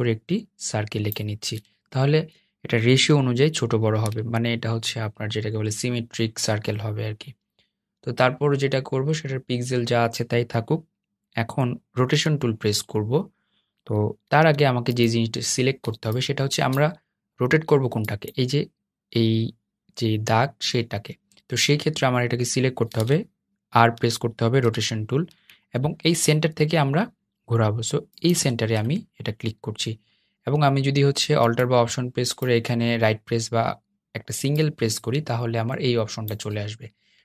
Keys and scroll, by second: 13.4 r, 21.6 r.